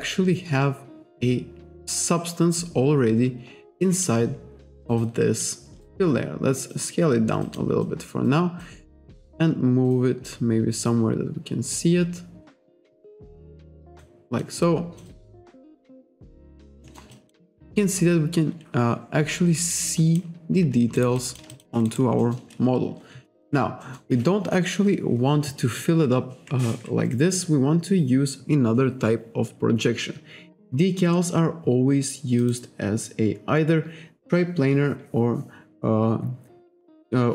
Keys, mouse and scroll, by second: 5.4 click, 7.8 click, 13.7 click, 14.4 click, 15.3 click, 16.4 alt+click, 17.1 alt+click, 19.6 alt+right click, 19.8 alt+click, 21.0 alt+right click, 21.2 alt+click, 21.5 alt+shift+click, 22.2 alt+middle click, 23.8 alt+middle click, 26.9-28.1 scroll up 1, 32.4 click.